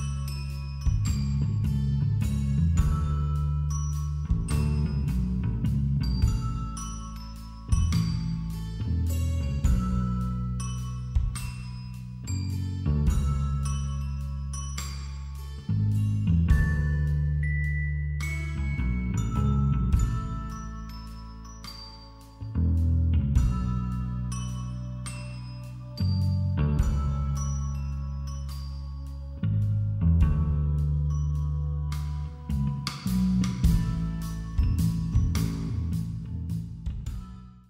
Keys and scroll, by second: 19.0 b, 25.1 ctrl+-.